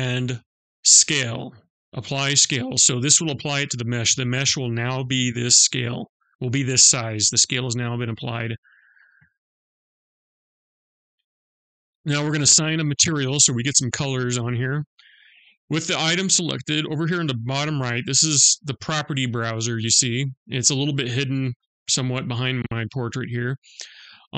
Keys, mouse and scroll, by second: 9.3-9.7 scroll up 2, 9.7 scroll down 1, 9.9-12.3 scroll up 1, 15.4 click.